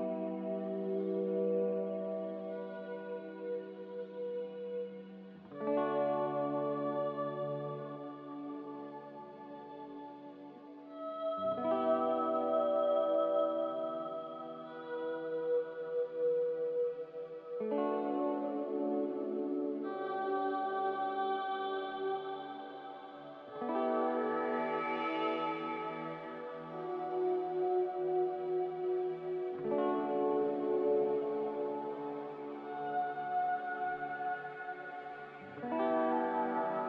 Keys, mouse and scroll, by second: 2.1 g, 4.6 z, 11.3-12.2 typing, 13.8-14.9 typing, 24.9-27.4 typing, 28.5-29.3 typing, 30.4-32.9 typing.